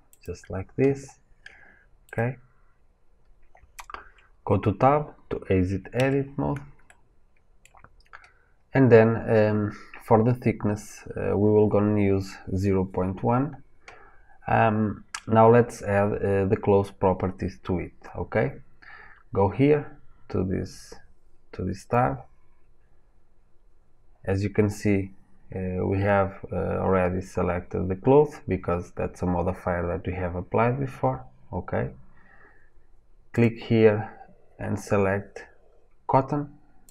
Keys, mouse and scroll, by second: 0.0-5.9 middle drag, 5.9 Tab, 6.8-36.9 middle drag.